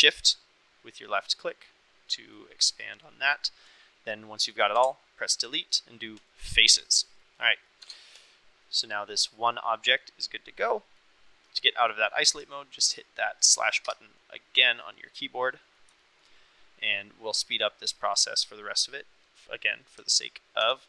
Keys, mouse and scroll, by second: 0.2-2.3 shift+drag, 3.0 shift+click, 4.7 Delete, 7.2 click, 7.4 middle click, 7.8 Tab, 8.1 click, 9.2-10.7 middle drag, 10.4 drag, 10.7 click, 10.8 middle click, 11.4-11.9 middle drag, 13.8 KP_Divide, 15.0-15.7 middle drag, 16.0 shift+middle drag, 16.2 KP_Divide, 16.3-18.5 middle drag.